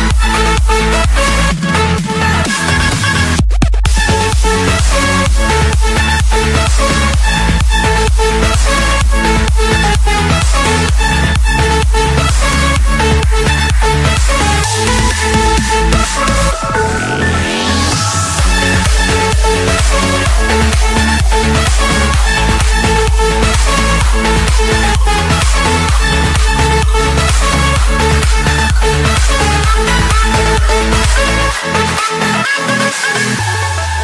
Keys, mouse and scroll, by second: 1.6-2.7 drag, 3.9 click, 6.4 click, 7.7 click, 8.2-8.6 scroll, 9.3 click, 9.6 Escape, 10.2 click, 11.8 Return, 13.4 5, 14.2 Return, 15.3 Return, 15.9 Return, 17.4 Escape, 19.1 click, 19.7 click, 20.3 click, 21.4-21.9 scroll, 22.2 click, 23.0 click, 25.0-26.3 drag, 28.9-30.1 drag, 30.6-31.8 drag, 31.9 click, 32.4 Escape, 33.8-34.0 drag.